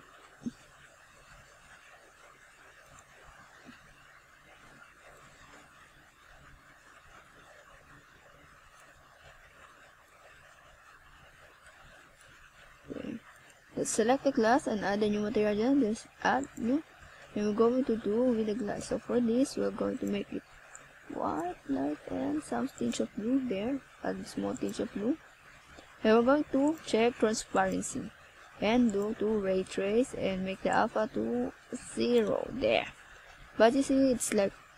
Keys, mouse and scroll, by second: 1.0-2.8 scroll down 5, 3.2 click, 6.6 middle click, 8.9 KP_7, 10.4 r, 12.7 click, 14.1 click, 17.7 KP_3, 20.4 r, 21.3 click, 22.0 KP_7, 23.5 r, 24.2 click, 24.8 scroll down 2, 27.1 click, 33.4 click.